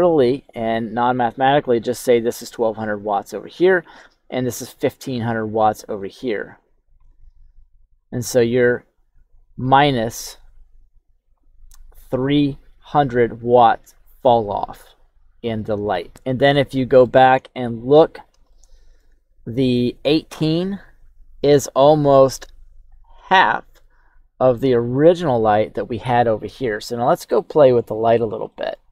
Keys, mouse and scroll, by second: 5.5 click, 6.3 click, 7.4 click, 8.4-9.5 drag, 9.8 click, 10.8 click, 12.1 click, 16.0 shift+middle click, 16.0-16.6 shift+scroll up 1, 16.6 shift+middle click, 17.3 KP_1, 17.8-18.4 scroll up 4, 18.4 shift+middle click, 28.0 click, 28.4 middle drag.